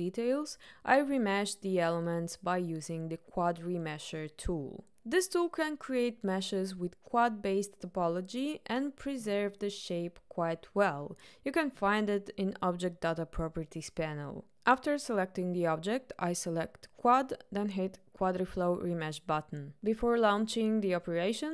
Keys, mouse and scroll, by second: 11.8 click, 13.6 click, 17.7-21.5 drag.